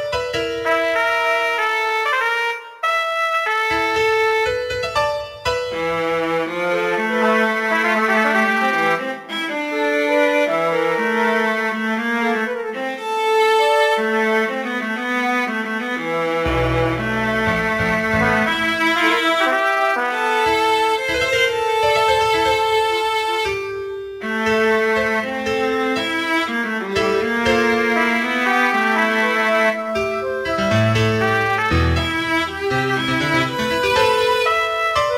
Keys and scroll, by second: 21.3 ctrl+d.